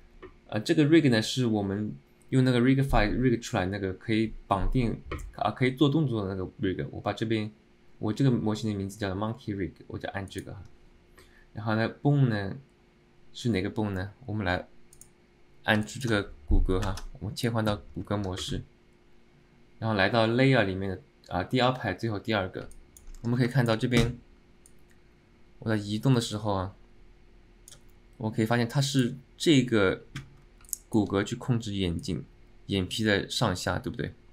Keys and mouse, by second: 16.0 alt+middle click, 22.8 alt+middle click, 23.6 shift+middle click, 24.9-28.0 drag, 30.8 alt+middle click, 32.2-34.3 drag.